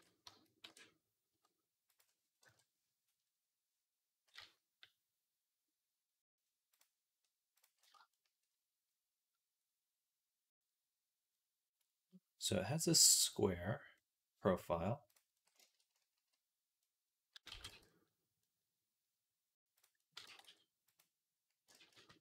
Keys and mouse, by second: 0.1 a, 0.5 e, 1.7-4.2 middle drag, 2.3 KP_1, 4.2 z, 13.8-17.7 middle drag, 17.3 x, 17.8-19.6 middle drag, 19.6 click, 20.1 g, 21.6 ctrl+z, 21.8 ctrl+z.